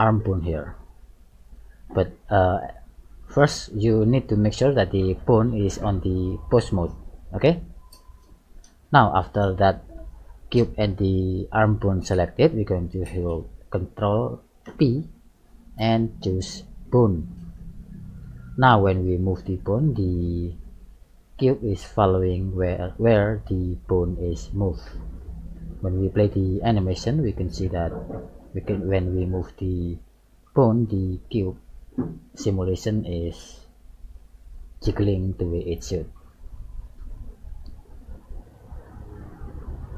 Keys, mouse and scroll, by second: 0.4-1.1 scroll down 4, 1.6-2.1 scroll up 2, 3.6 middle click, 5.7 click, 8.3 middle click, 14.7 ctrl+p, 18.9 right click, 20.0 g, 26.3 click, 28.0 g, 39.2 click.